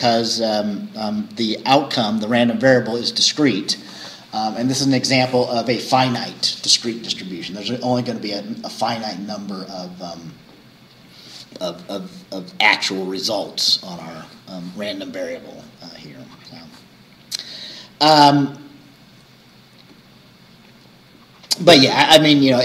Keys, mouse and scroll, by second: 16.8-17.1 scroll down 2, 17.5-18.1 scroll down 4.